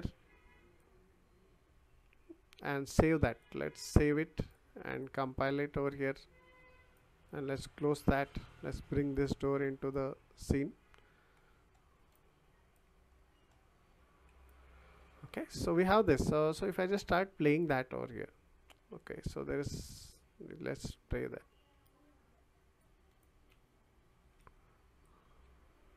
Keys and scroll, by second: 21.8 q, 24.4 w.